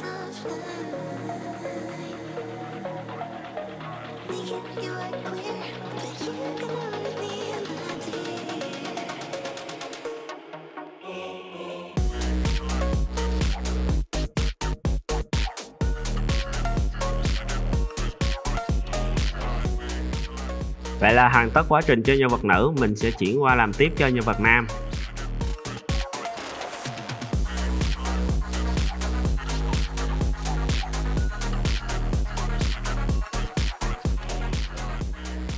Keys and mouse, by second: 0.2 `, 0.6 g, 1.1 s, 1.6 r, 2.1-2.9 middle drag, 3.5 click, 3.8 click, 4.1 Tab, 4.3 middle drag, 4.5 z, 4.8-5.4 middle drag, 6.0 Tab, 7.4 ctrl+r, 7.9 click, 8.1 shift+click, 8.3 click, 8.5 `, 9.0 e, 9.4 r, 10.2 click, 11.1 z, 11.6 2, 11.7 click, 11.9 e, 12.6 `, 13.1 middle click, 13.4 click, 13.9 middle click, 14.4 s, 14.7 r, 15.2-15.7 drag, 15.7 Tab, 15.9 z, 16.1 click, 17.0 click, 17.4 middle click, 17.5 click, 18.1-19.7 middle drag, 20.1 click, 20.8-22.3 drag, 22.8 click, 23.4 click, 24.7-25.0 drag, 25.0 shift+drag, 25.3 click, 26.0 click, 26.5 drag, 27.5-28.8 middle drag, 29.5 shift+d, 30.6 click, 31.3 click, 31.6 click, 31.9 click, 32.4 click, 33.7 `, 34.1 shift+drag, 34.5 shift+drag.